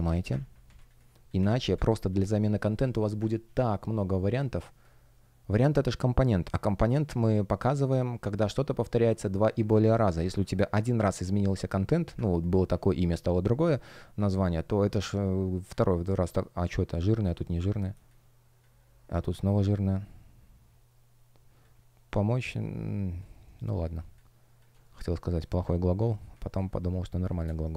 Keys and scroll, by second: 1.3 Delete, 1.7 space, 4.5 space, 13.9 space, 24.7 shift+o, 26.3 space, 27.4 shift+p.